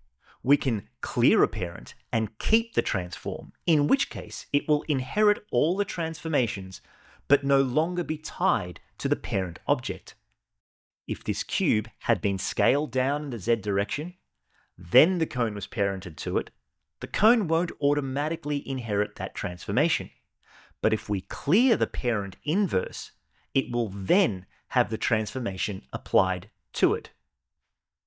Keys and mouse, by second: 1.4 alt+p, 5.2 click, 5.7 g, 8.0 right click, 10.7 s, 11.0 z, 14.0 click, 14.9 shift+click, 16.0 ctrl+p, 18.6 click, 20.3 alt+p, 24.3-25.0 shift+middle drag, 25.2 middle click.